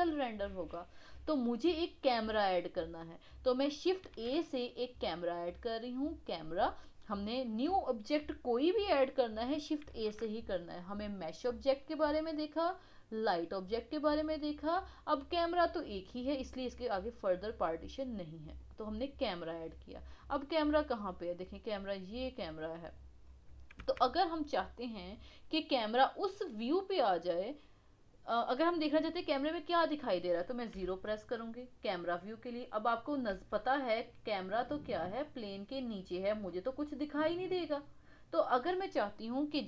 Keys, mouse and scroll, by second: 4.1 shift+a, 9.9 shift+a, 19.7-20.1 scroll down 2, 20.1-21.3 middle drag, 21.3-21.9 scroll up 1, 21.9-23.2 middle drag, 23.2-23.7 scroll down 3, 23.7 KP_1, 24.3-24.7 scroll down 4, 24.7-25.7 middle drag, 25.7 scroll up 2, 26.2-29.4 middle drag, 30.8 KP_0, 32.5 scroll down 1, 33.0 middle click, 33.7-34.3 middle drag, 35.1-36.1 middle drag, 36.5-38.8 middle drag, 38.8-39.1 scroll down 4, 39.1-39.6 middle drag.